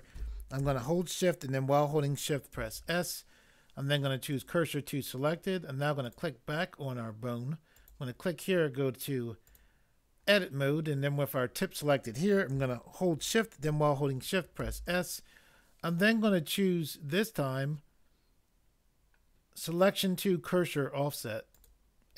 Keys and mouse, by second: 2.6 s, 14.7 s.